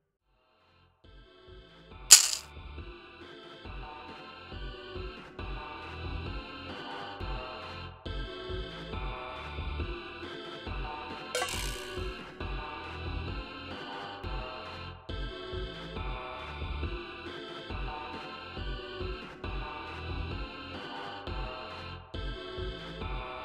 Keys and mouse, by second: 3.5 click, 4.7 click, 5.1 click, 8.4 click, 11.1 click, 12.9 right click, 14.0 click, 14.8 click, 15.9 click, 17.4 0, 18.3 click, 19.7 click, 21.5 ctrl+z.